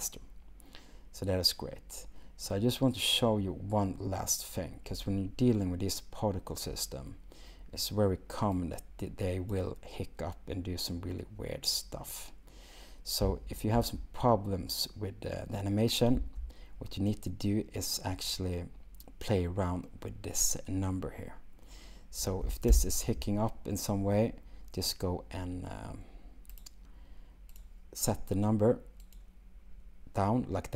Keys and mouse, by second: 8.6-9.8 drag, 13.2 space, 29.1 click.